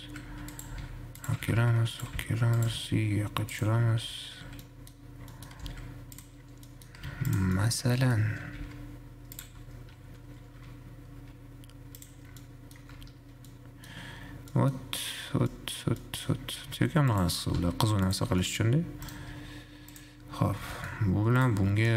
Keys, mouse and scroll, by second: 0.6 s, 1.1 g, 1.6 g, 3.1 g, 4.2 `, 4.6-5.6 scroll down 4, 5.6 middle click, 5.8 s, 6.6-7.1 scroll down 3, 7.1 middle click, 7.2 g, 7.8-8.7 middle drag, 8.7 g, 10.1 `, 10.6-11.6 scroll up 3, 11.6 g, 12.6-13.1 middle drag, 13.1 `, 13.6-14.7 scroll down 5, 13.7-14.1 middle drag, 14.7 middle click, 15.1-15.7 scroll up 4, 15.7-16.6 shift+middle drag, 16.6 scroll down 4, 16.9 Tab, 17.1 3, 17.6 click, 17.7 g, 18.6-19.3 middle drag, 19.3 shift+right click, 19.6 shift+a, 21.1-21.6 middle drag, 21.6 shift+click.